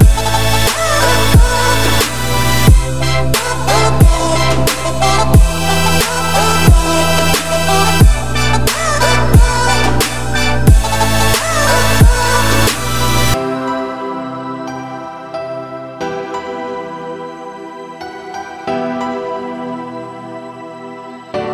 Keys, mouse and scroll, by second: 0.1 `, 0.5-1.1 middle drag, 1.1 click, 1.6-2.1 drag, 3.4-4.5 drag, 5.6-6.8 drag, 6.8-7.3 scroll down 10, 7.4-8.2 middle drag, 8.2 scroll down 4, 8.5-8.8 shift+middle drag, 8.8-9.5 scroll up 5, 9.5-10.2 middle drag, 10.2-11.1 scroll up 6, 11.1 click, 12.0-13.2 drag, 15.5-16.2 scroll down 8, 16.2-17.4 middle drag, 17.4 click, 17.6 `, 18.7-19.6 drag.